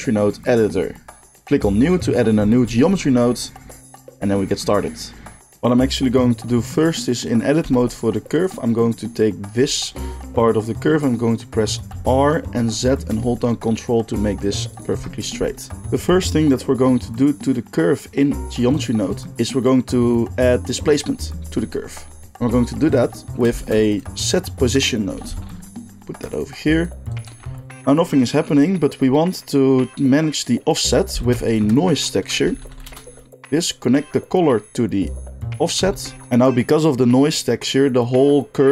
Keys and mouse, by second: 2.8 n, 7.6 Tab, 8.4-10.0 drag, 11.9 r, 13.2 right click, 14.1-15.9 drag, 23.6 shift+a, 26.3-26.7 drag, 27.4 g, 27.7-33.9 drag, 31.2 shift+a, 33.9-38.7 middle drag.